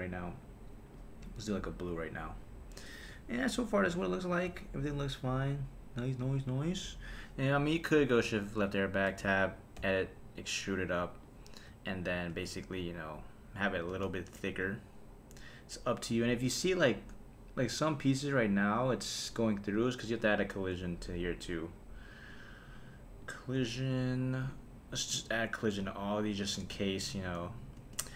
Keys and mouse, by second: 2.9 click, 7.4 click, 8.3 shift+Left, 9.1 Tab, 9.8 e, 11.2 click, 11.7 Tab, 12.3 space, 13.9 space, 19.4 click, 21.2 click, 22.3 click, 23.2 click, 25.0 click, 26.1 click, 27.0 shift+Left, 27.8 space.